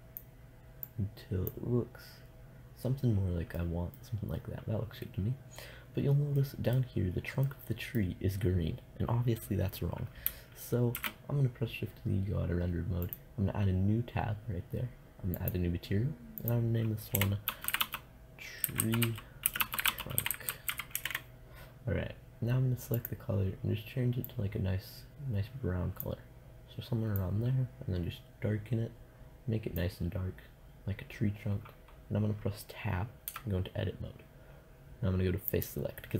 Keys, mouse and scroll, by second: 3.8 middle click, 11.1 shift+z, 13.2-19.2 drag, 19.2 e, 33.5 Tab.